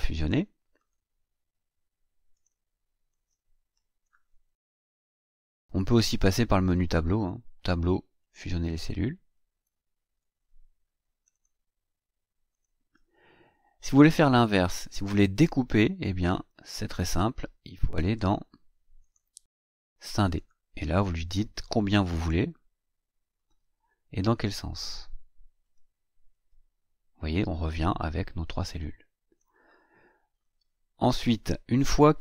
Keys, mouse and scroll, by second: 0.7 right click, 2.3 click, 3.1 click, 6.7 click, 8.1 click, 9.3 click, 11.3 click, 12.4 click, 15.8 click, 18.9 click, 20.2 click, 23.3 click, 24.3 click, 25.6 click, 28.7 click.